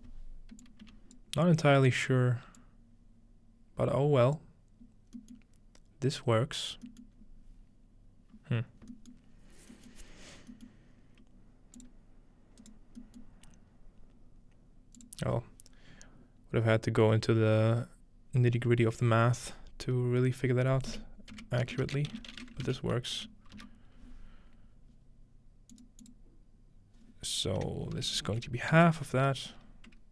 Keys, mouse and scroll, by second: 0.6 click, 0.9 d, 1.9 click, 2.6-4.4 drag, 5.4-6.9 middle drag, 6.1-7.2 scroll down 1, 7.1-8.9 middle drag, 7.2-8.2 scroll up 1, 8.2-8.9 scroll up 1, 9.1 middle click, 9.7-11.8 scroll up 3, 11.8-13.2 drag, 12.6 right click, 13.3-15.0 middle drag, 13.7-14.7 scroll up 1, 14.7-15.0 scroll up 1, 15.0-17.1 drag, 20.9-23.2 typing, 25.7-27.8 drag, 28.0 BackSpace.